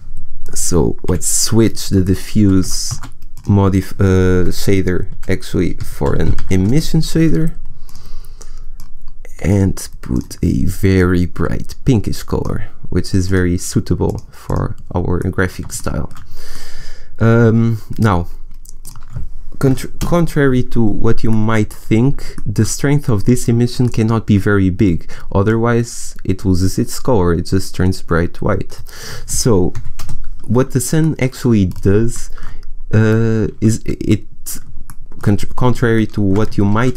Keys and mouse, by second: 0.3 right click, 1.0 Delete, 2.8 shift+a, 6.5 s, 9.1-14.4 drag, 15.8-17.6 middle drag, 18.7-21.3 middle drag, 25.4-30.9 middle drag, 33.5 a, 36.6 shift+a.